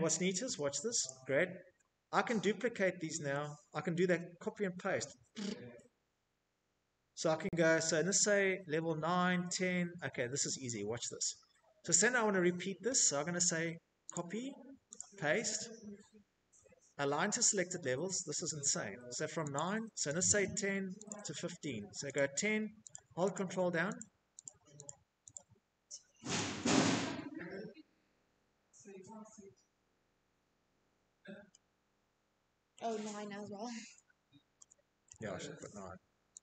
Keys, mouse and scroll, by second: 3.8 middle click, 4.5-5.7 scroll, 6.1-9.5 scroll, 11.5 click, 12.3 middle click, 12.3 click, 14.7 click, 16.9 click, 17.6 click, 18.5 click, 19.5 click, 20.3 click, 20.7 click, 21.4 click, 21.8 click, 22.2 click, 22.7 click, 23.7 click, 28.1 middle click, 28.2 middle click, 28.2 middle click, 28.3 middle click, 28.5 scroll, 28.9 middle click, 29.3 middle click, 30.1 middle click, 30.7 Escape, 31.0 Escape, 32.0 Tab, 32.5 Tab, 33.0 Tab, 34.4 Delete.